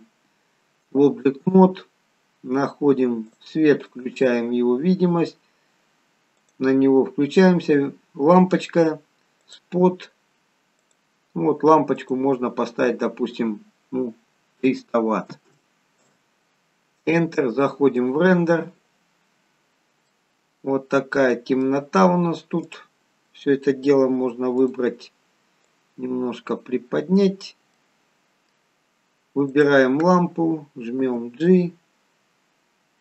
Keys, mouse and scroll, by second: 3.2 click, 4.0 click, 9.5 click, 10.9 click, 15.5 0, 18.8 click, 19.6-20.2 scroll down 4, 20.1 middle click, 23.0 click, 24.6 click, 27.8 middle click, 29.5 click, 31.1 g.